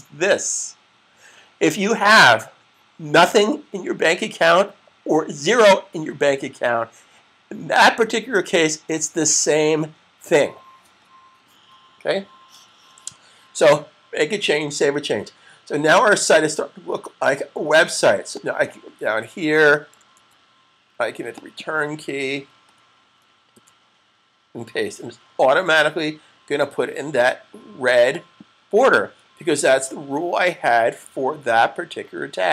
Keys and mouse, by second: 18.2 click, 20.0 super+c, 21.4 click, 23.2 click, 29.4 click.